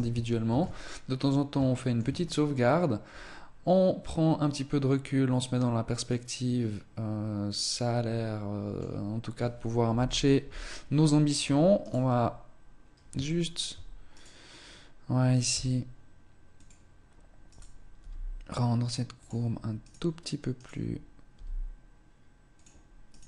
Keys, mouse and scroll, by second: 0.0 ctrl+s, 1.0 scroll up 1, 1.6 shift+middle click, 2.0 middle click, 9.8 KP_1, 10.6 scroll up 2, 10.7 Tab, 11.7 right click, 13.2 shift+middle click, 14.0 right click, 15.4 s, 17.0 right click, 17.8 g, 19.1 click, 19.7 right click, 20.4 right click, 21.2 g, 23.0 right click, 23.0 g.